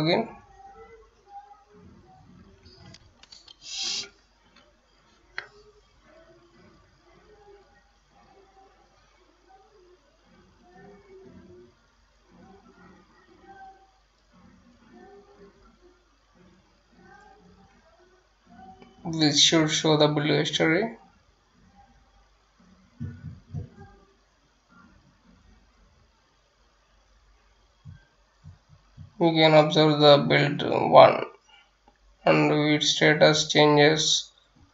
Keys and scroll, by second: 0.4-4.6 typing.